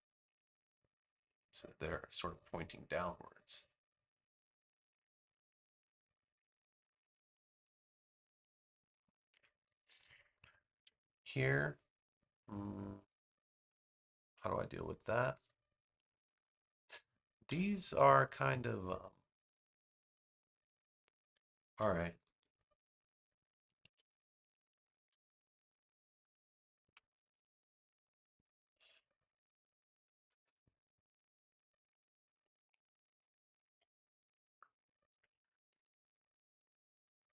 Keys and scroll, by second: 8.1 space, 10.7 super+v, 17.4 BackSpace, 21.5 a, 23.8 super+z, 25.0 super+=, 25.6 space.